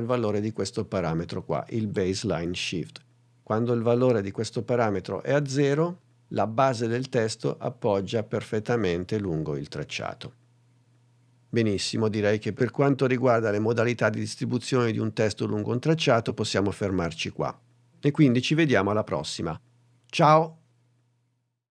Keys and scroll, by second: 4.1 0.